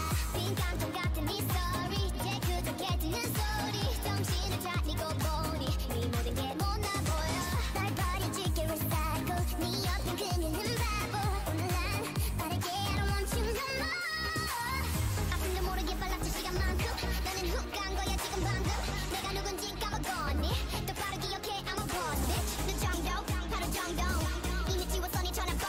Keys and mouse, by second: 0.0-1.8 drag, 1.1 x, 6.2 click, 6.7 right click, 7.5 Tab, 8.1-10.0 typing, 9.1 Tab, 11.4 KP_1, 12.1 s, 14.3 g, 15.4 Tab, 15.8 middle click, 16.5 middle click, 17.2-18.8 drag, 17.5 KP_1, 18.4 KP_7, 20.5 ctrl+z, 21.6 ctrl+z, 22.4 shift+a.